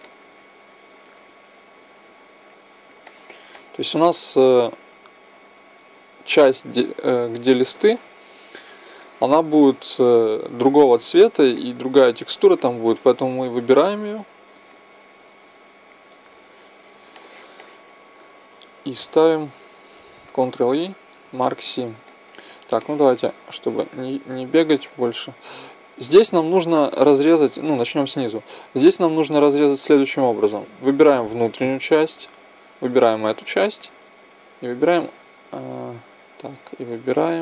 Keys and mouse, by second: 0.1-1.7 middle drag, 1.7-4.0 right drag, 4.0 click, 4.0-6.5 middle drag, 4.8-6.5 drag, 6.6 click, 6.6 middle click, 7.2 click, 7.2-16.6 middle drag, 7.5 right click, 14.1 click, 14.1 right click, 15.7 click, 15.7-16.0 right drag, 16.6-18.5 right drag, 17.1-18.5 drag, 17.1-20.6 middle drag, 18.6-20.6 drag, 18.6-21.1 right drag, 20.6 ctrl+e, 23.8 middle click, 28.7-30.5 right drag, 29.9 z, 30.6 z, 32.2 z, 33.2-35.0 right drag.